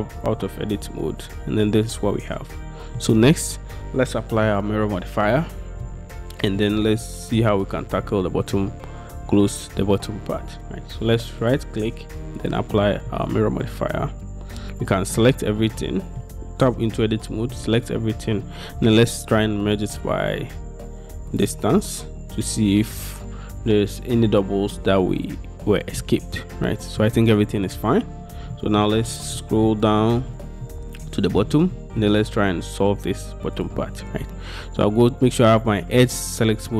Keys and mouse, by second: 0.5-3.1 middle drag, 6.7-7.4 middle drag, 11.5-12.6 middle drag, 13.2 middle click, 15.2 a, 15.9 middle click, 16.4 Tab, 17.6 a, 18.9 m, 26.1-27.1 middle drag, 28.6 shift+click, 29.4 click, 30.1 shift+click, 30.7 click, 31.9 shift+click, 33.6 click.